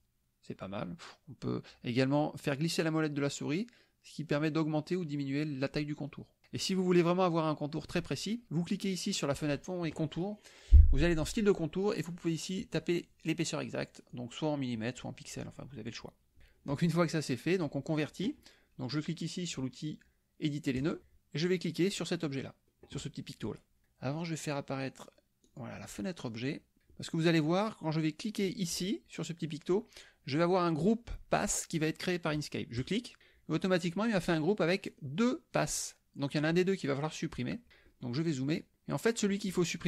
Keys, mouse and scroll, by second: 2.8-4.1 scroll up 6, 4.3 scroll up 2, 4.8-5.6 scroll down 2, 6.2 scroll down 2, 11.2 click, 12.6 click, 14.1-16.1 drag, 16.8 click, 20.8 click, 25.5 click, 26.5 click, 32.8 click, 34.9 click, 35.6 click, 36.3 click, 37.9 click, 38.4 click, 39.5 click.